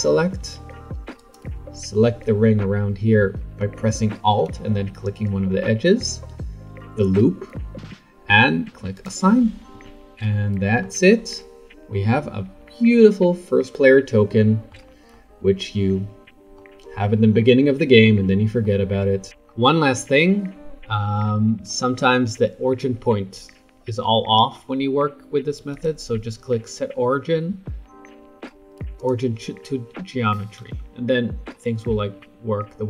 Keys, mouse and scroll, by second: 1.2 alt+click, 8.9 click, 9.7 Tab, 10.3-11.0 middle drag, 11.0-11.5 scroll down 2, 11.5-11.9 scroll up 2, 11.9-14.5 middle drag, 15.1-19.3 middle drag, 19.3-20.0 scroll up 7, 20.0-21.7 scroll down 5, 21.7-24.6 shift+middle drag, 24.6 scroll up 2, 25.7-28.9 right drag, 30.6 r.